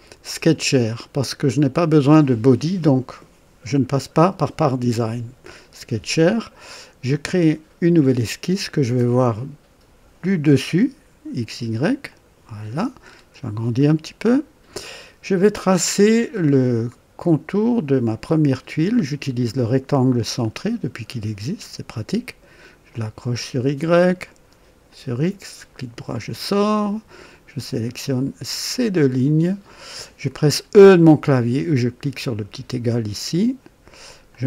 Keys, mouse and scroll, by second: 0.3 click, 7.2 click, 12.1 click, 13.1 scroll up 1, 13.8-14.8 right drag, 18.4 click, 20.4 click, 22.9 click, 24.9 click, 25.7 right click, 27.5 click, 28.7 click, 32.4 e, 34.3 click.